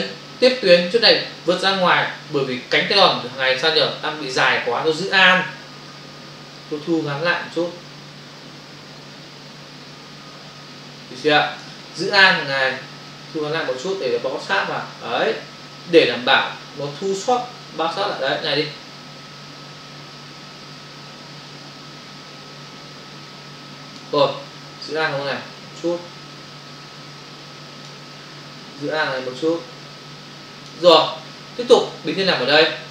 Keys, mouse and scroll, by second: 6.5 alt+click, 13.1 alt+click, 25.8 alt+click, 29.1 alt+click.